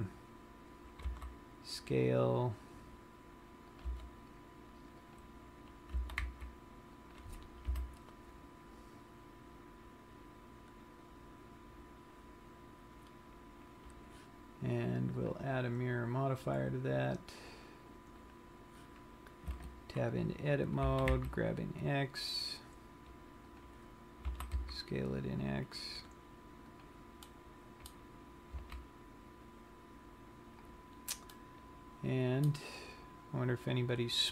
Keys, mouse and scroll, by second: 0.0 click, 0.5-1.5 scroll up 5, 1.5 s, 4.3 click, 4.3 g, 5.8 click, 6.7 g, 7.6 click, 8.2 KP_1, 9.5 scroll down 1, 11.1-11.7 scroll up 3, 15.8 click, 20.3 Tab, 21.2 g, 24.1 click, 24.9 s, 27.3 click, 27.6 middle click, 29.0 z, 31.6 middle click, 33.1 scroll down 1, 34.2-34.3 scroll up 6.